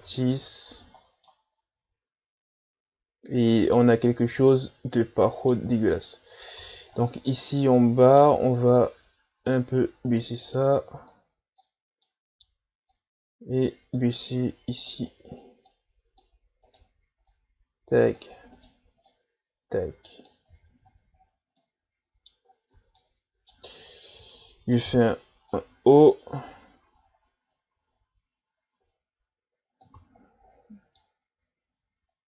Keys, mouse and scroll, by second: 0.1 Tab, 0.7 a, 1.0 scroll down 3, 1.2-4.1 middle drag, 4.1-4.5 scroll up 5, 4.5-6.6 middle drag, 6.6 Tab, 7.4 right click, 7.8-8.9 middle drag, 8.9-10.1 drag, 10.1-11.1 right drag, 11.1 click, 12.1 middle click, 12.9-14.0 drag, 14.0 middle click, 14.8 right click, 15.7-16.7 drag, 16.7 right click, 17.3-18.5 drag, 18.5 right click, 19.1-20.5 drag, 20.5 Tab, 21.2-21.6 scroll down 4, 21.6-22.5 middle drag, 22.5-22.9 scroll up 4, 22.9 Tab, 23.0-24.8 middle drag, 24.8 o, 25.5-28.5 drag, 30.0 Tab, 30.5-31.0 scroll down 5, 31.0-32.2 middle drag.